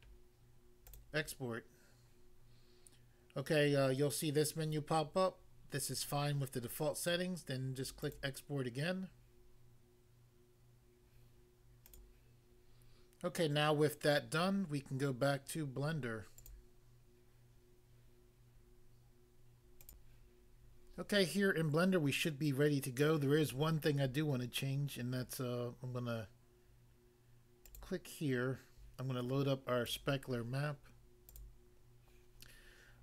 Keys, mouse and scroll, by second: 0.9 click, 8.0 click, 11.9 click, 16.4 click, 16.5 click, 19.8 click, 21.1 click, 27.7 click, 27.8 click, 29.8 click, 30.0 click, 31.3 click, 31.4 click.